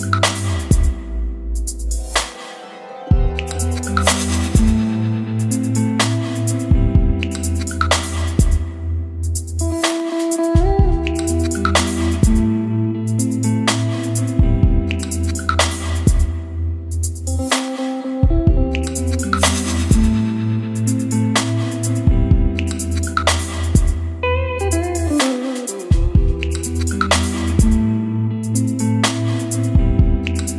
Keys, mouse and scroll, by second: 9.2-10.3 scroll down 2, 10.3-29.6 drag, 29.6-30.3 scroll down 2, 30.3-30.5 drag.